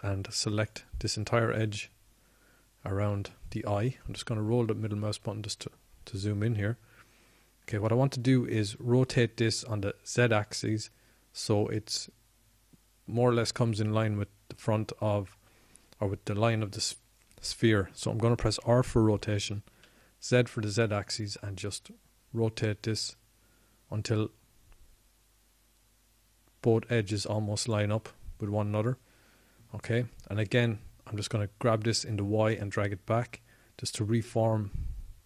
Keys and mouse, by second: 8.7 middle click, 8.9-12.0 middle drag, 22.1 r, 34.8-35.2 drag.